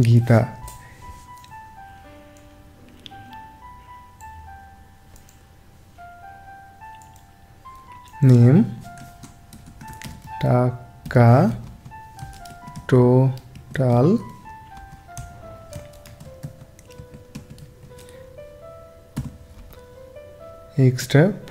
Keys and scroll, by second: 9.0 Caps_Lock, 10.0 shift+t, 10.2 a, 11.1 a, 11.6 Right, 12.4 shift+t, 12.7 o, 13.9 l, 14.7 Right, 15.1 Up, 16.0 shift+e, 16.4 x, 19.1 =, 19.5 Right, 21.0 5.